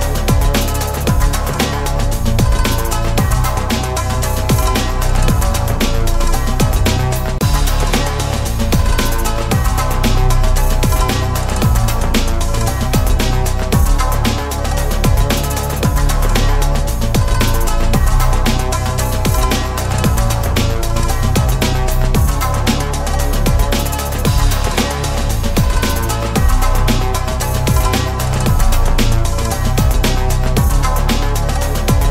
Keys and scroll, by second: 0.8 ctrl+s, 17.2 ctrl+z.